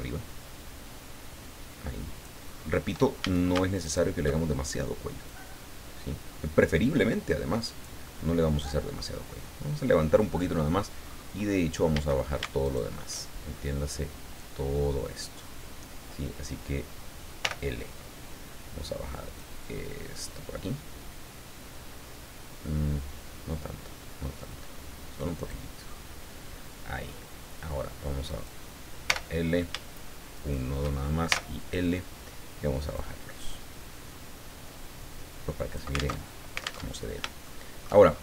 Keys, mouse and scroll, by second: 3.2 a, 3.8 alt+shift+right click, 5.3-8.0 drag, 8.1-8.6 scroll down 4, 8.8-10.3 middle drag, 11.0-11.4 scroll up 2, 11.9 a, 12.6 alt+shift+right click, 13.4-13.8 alt+shift+scroll down 3, 17.4 l, 19.4-25.7 drag, 25.8-26.3 scroll up 2, 26.8 scroll down 2, 28.3 right click, 29.0 l, 30.3 shift+right click, 31.3 shift+l, 32.9-36.1 drag, 36.2 alt+Tab, 36.9 alt+Tab, 37.5 shift+middle click, 38.1-38.2 shift+scroll up 2.